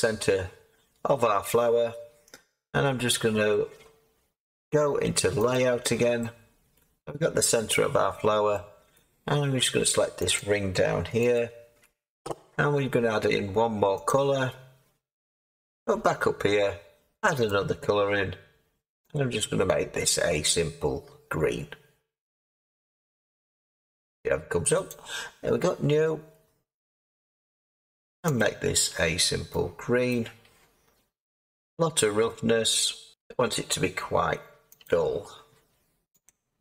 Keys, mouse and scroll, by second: 0.6-2.2 scroll up 1, 2.2-3.0 scroll up 1, 3.0-3.4 scroll up 1, 3.4 middle click, 3.5-4.0 scroll up 1, 4.0-5.4 scroll up 1, 5.4-6.7 scroll, 6.7 click, 7.7-9.2 middle drag, 9.2 Tab, 10.3 click, 11.3 alt+click, 14.0-15.2 drag, 15.2-17.4 scroll up 15, 17.4-30.7 drag, 30.7-33.1 scroll down 9, 33.1 click, 33.4-34.8 scroll, 34.8 click.